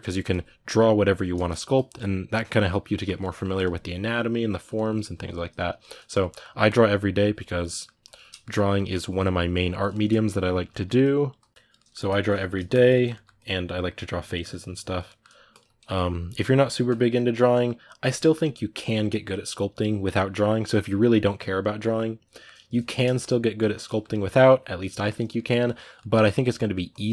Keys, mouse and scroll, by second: 0.0-1.1 drag, 1.1 middle click, 1.5-3.0 drag, 3.0 middle click, 3.3-4.5 drag, 4.5 middle click, 4.8 click, 5.2 middle click, 5.9 click, 6.1 middle click, 6.4-7.4 drag, 7.4 middle click, 7.8 ctrl+click, 8.1 shift+middle click, 8.7-9.7 drag, 9.7-10.8 shift+middle drag, 10.8-12.2 drag, 12.2 shift+middle click, 12.5 click, 12.7 ctrl+middle click, 13.1 click, 14.0 middle click, 14.3 click, 14.8 middle click, 15.3-16.9 ctrl+drag, 16.9-24.0 middle drag, 24.0-25.1 drag, 25.1 middle click, 25.4 click, 25.7 middle click, 26.0 click, 26.3 middle click, 26.7 click, 26.9 shift+middle click.